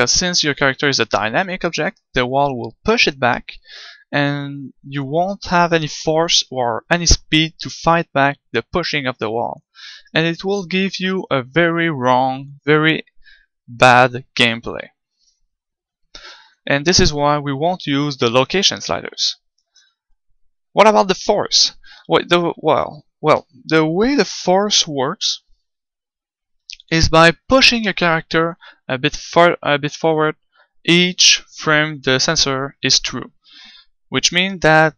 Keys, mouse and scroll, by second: 10.0-34.9 right drag.